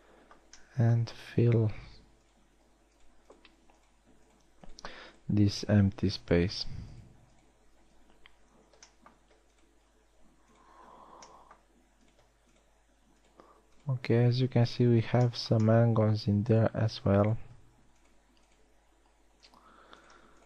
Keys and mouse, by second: 7.3 shift+right click, 11.6 f, 15.5 f.